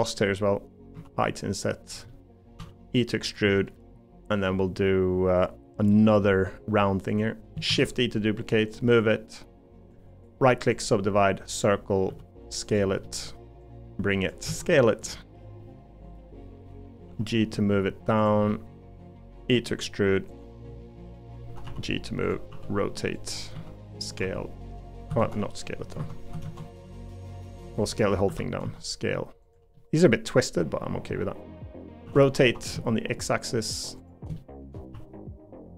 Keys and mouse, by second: 0.9 i, 2.1 middle click, 2.6 e, 3.5 middle click, 4.5 middle click, 5.9 middle click, 7.7 shift+d, 10.8 right click, 11.6 click, 12.1 s, 13.0 middle click, 14.4 s, 15.6 middle click, 16.6 middle click, 17.1 g, 18.5 middle click, 19.4 e, 21.6 g, 22.5 r, 23.5 s, 24.2 g, 25.9 Escape, 26.4 ctrl+z, 27.1 middle click, 28.3 l, 28.6 s, 29.7-31.8 middle drag, 32.0 r, 34.4 middle click, 34.9 g.